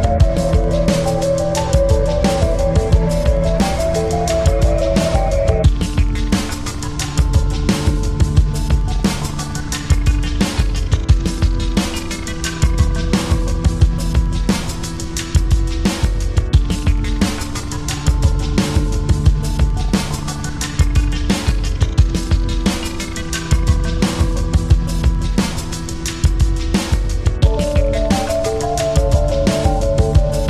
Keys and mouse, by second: 0.2 ctrl+z, 1.0 alt+click, 2.6 ctrl+z, 4.6 click, 7.5 space, 7.8 click, 8.0 space, 8.6-13.1 drag, 11.7 typing, 13.1 ctrl+=, 14.0 space, 15.8 click, 16.2 space, 16.7 click, 16.9 space, 18.8 typing, 19.0-27.8 drag, 27.9 ctrl+-, 28.7 space.